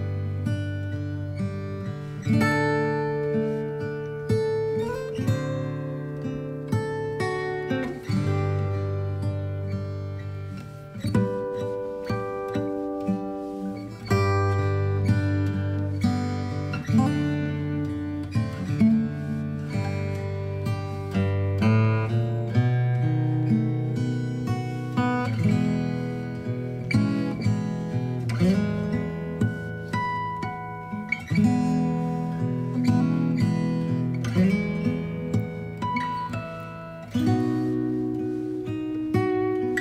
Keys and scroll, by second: 4.1 ctrl+b, 4.4 alt+x, 12.0 ctrl+g, 13.4 ctrl+alt+shift+e.